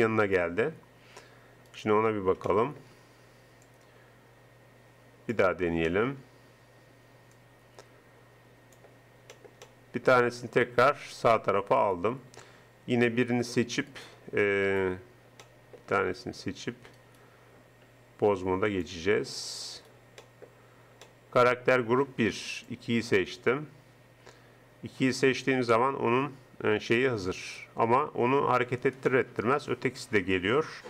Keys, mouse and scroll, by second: 3.7 middle click, 3.7 click, 4.1-5.3 middle drag, 5.9 middle click, 7.4 middle click, 9.0 middle click, 11.8-13.4 drag, 15.5 middle click, 18.8 click, 19.7 middle click, 20.4 click, 21.4-23.9 middle drag, 25.1-26.7 right drag, 26.9 r, 29.1 click.